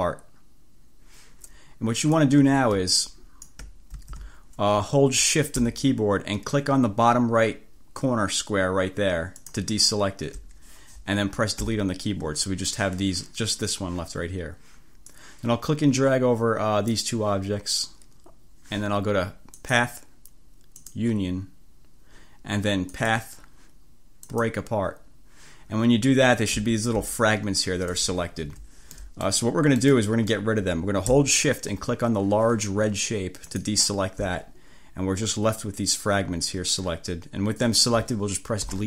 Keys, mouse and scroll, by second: 2.3-3.7 drag, 4.0 ctrl+z, 9.5 shift+click, 11.9 Delete, 15.2-17.3 drag, 19.7 click, 20.9 click, 23.0 click, 24.3 click, 26.8-27.1 ctrl+scroll up 2, 28.5 1, 29.1 click, 29.3 scroll up 2, 29.5 click, 29.8 click, 33.5 shift+click, 38.7 Delete.